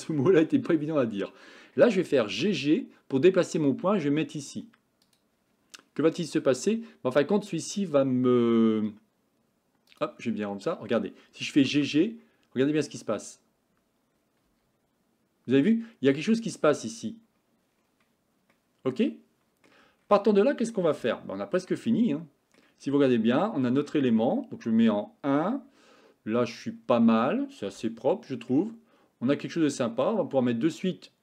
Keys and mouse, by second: 2.4 g, 7.7 click, 10.0 click, 11.6 g, 18.6-19.7 middle drag, 21.2 shift+middle click, 21.9 middle click, 23.5 shift+middle click, 24.8 KP_1, 27.9 shift+middle click, 30.4 Tab.